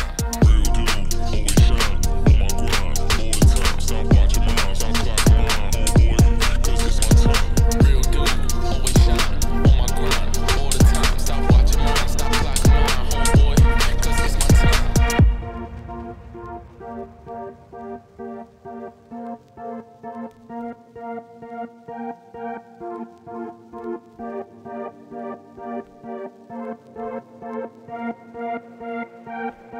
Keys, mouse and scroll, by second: 0.4 click, 0.5 Tab, 0.9 middle click, 1.1 KP_Divide, 1.7 click, 1.9 shift+click, 2.0 x, 2.4 middle click, 2.9 click, 3.1 shift+click, 3.2 x, 3.5-4.5 middle drag, 4.8 click, 5.6 alt+shift+click, 6.9 u, 8.4 middle click, 8.5-8.8 scroll down 3, 8.8 KP_Divide, 9.3 Tab, 9.9 click, 10.8 middle click, 11.3 scroll down 1, 11.5-13.1 shift+middle drag, 13.1 click, 13.2 shift+middle click, 13.4 scroll up 5, 13.6-14.0 scroll down 2, 14.0 KP_Divide, 14.2 Tab, 14.8 click, 14.9 x, 15.2 middle click, 15.9 click, 15.9 x, 16.5 middle click, 17.1 alt+click, 17.8 u, 19.9 g, 20.3 middle click, 21.0 KP_Divide, 21.2 scroll down 2, 21.4 Tab, 22.4 click, 22.7-23.9 shift+middle drag, 23.9-24.6 scroll down 1, 24.6 click, 24.8 shift+middle click, 24.9 scroll up 2, 25.1 Tab, 25.4 middle click, 25.7 a, 26.7 u, 27.2 Tab, 28.1 click, 28.4-29.2 scroll down 3.